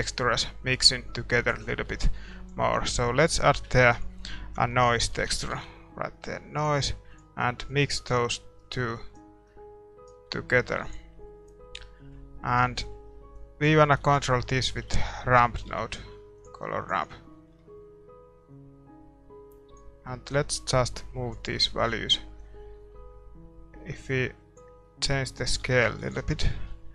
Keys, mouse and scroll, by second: 10.1-11.2 right drag, 10.5-16.8 middle drag, 10.8 ctrl+s, 16.8 shift+a, 17.0-24.1 drag, 17.3-19.3 middle drag, 21.5-23.2 middle drag, 24.8-26.9 middle drag, 26.0-26.9 drag, 26.1 ctrl+s.